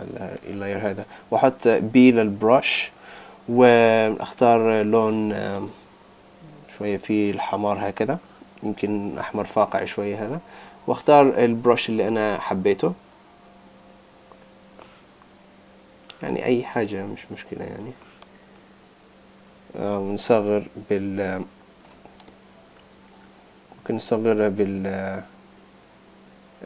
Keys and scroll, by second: 22.3 super+z.